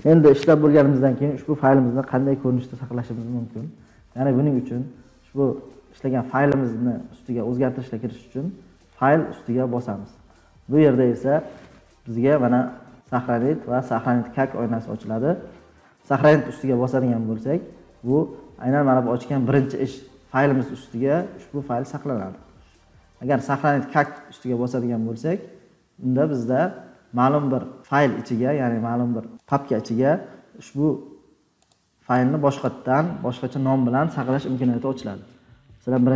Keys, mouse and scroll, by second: 8.9 click, 24.1 click, 28.5 scroll down 5, 29.9 scroll, 30.0 click, 31.6 click, 32.6 click, 35.3 click.